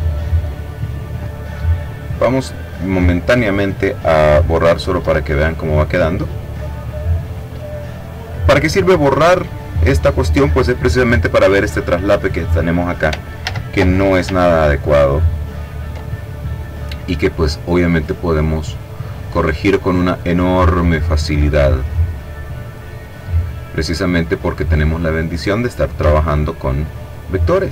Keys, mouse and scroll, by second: 1.3 click, 4.3 Delete, 12.7 ctrl+z, 14.4-14.9 scroll up 2, 14.9 scroll up 1, 15.5 click, 17.2 click, 18.1 click, 19.4 click, 23.7-25.2 drag, 25.5 shift+click, 26.3 click, 27.3-27.7 drag.